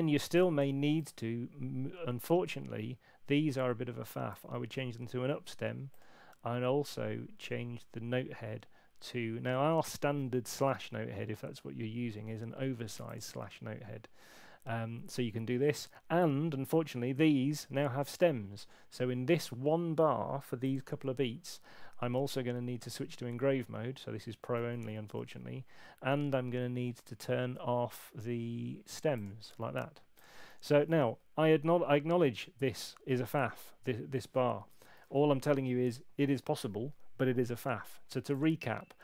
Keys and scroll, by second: 24.9 super+8, 30.9 super+2, 34.9 super+8.